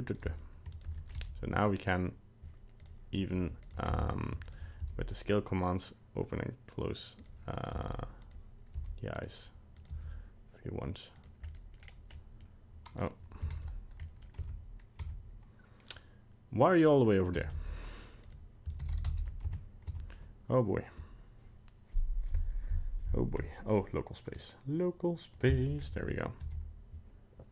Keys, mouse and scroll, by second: 0.7 shift+right click, 1.2 s, 3.6 right click, 3.9 alt+g, 4.4 shift+right click, 4.8 s, 7.8 s, 8.8 s, 9.8 right click, 9.9 g, 11.5 middle click, 11.9 scroll down 2, 12.1 middle click, 13.0 right click, 13.6 alt+g, 14.0 middle click, 14.5 Tab, 15.1 Tab, 17.3 g, 18.9 alt+r, 19.0 alt+g, 19.1 alt+s, 19.5 Tab, 20.0 Tab, 24.3 click, 25.8 middle click, 26.0 middle click, 26.5 g.